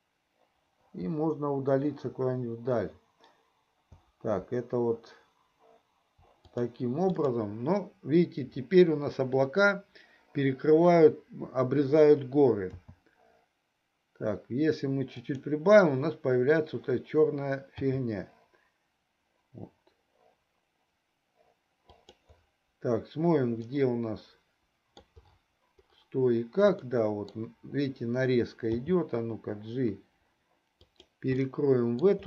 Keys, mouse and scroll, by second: 7.3 click, 12.9 s, 18.1 g, 24.0-25.2 middle drag, 26.8-27.4 middle drag, 28.7 g, 31.5-32.2 middle drag.